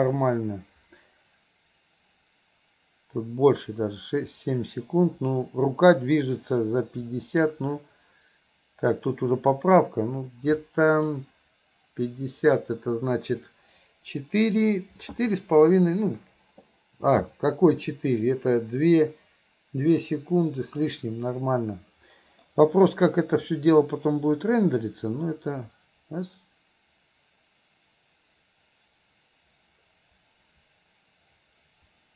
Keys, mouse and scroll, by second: 21.0-22.5 middle drag, 23.6-32.1 drag.